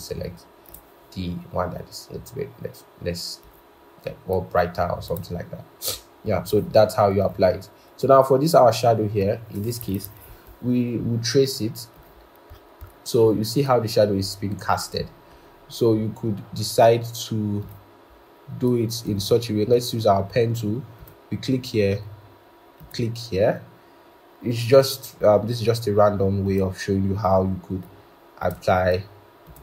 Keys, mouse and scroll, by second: 10.1 ctrl+=, 12.5 scroll.